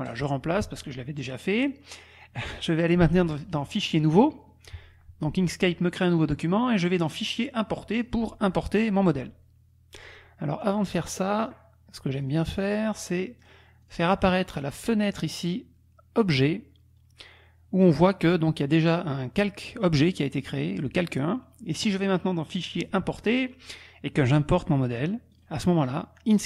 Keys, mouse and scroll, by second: 0.2 click, 3.4 click, 3.9 click, 7.1 click, 8.0 click, 10.7 click, 12.2 click, 13.4 click, 13.9 click, 16.2-17.4 drag, 17.9 click, 22.5 click, 23.3 click, 24.3 click, 25.3 click.